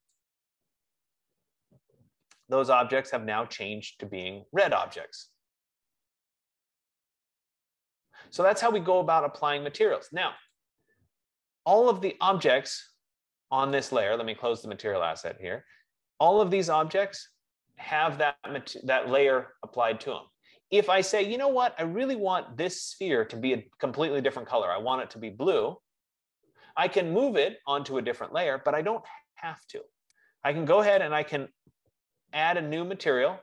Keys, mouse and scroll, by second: 0.4-5.4 drag, 11.2 click, 14.4 click, 15.0 click, 22.7 click, 30.7 click, 31.3 click.